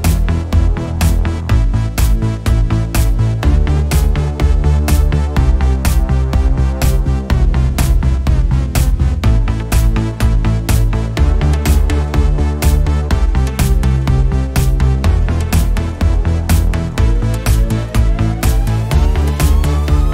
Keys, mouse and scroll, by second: 11.0 click, 16.4 alt+scroll up 1, 16.7-18.7 drag, 19.2-19.8 scroll up 1, 19.8 click.